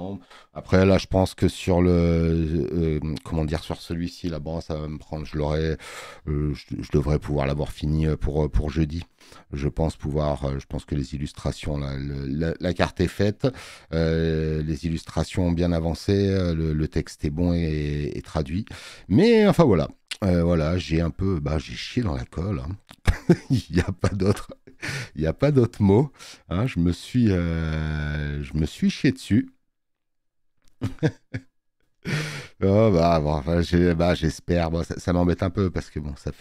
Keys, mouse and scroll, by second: 34.0 space, 34.1 click, 35.6 space.